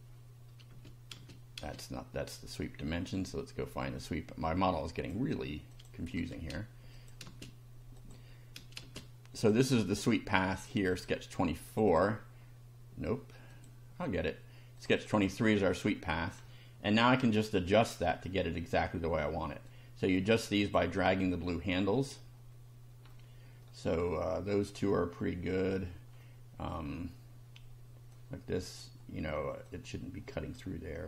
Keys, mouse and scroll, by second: 0.7 space, 3.3-5.2 drag, 5.7 click, 6.1 space, 6.9 click, 7.3 space, 8.0 click, 8.8 space, 9.4 click, 10.5 click, 10.9 click, 11.7 click, 13.5 click, 14.8 click, 16.4-17.0 shift+middle drag, 17.1 shift+middle click, 19.7-20.9 drag, 23.1-23.8 middle drag, 23.9-24.6 middle drag, 26.1-26.9 middle drag, 28.1 click, 29.7 click.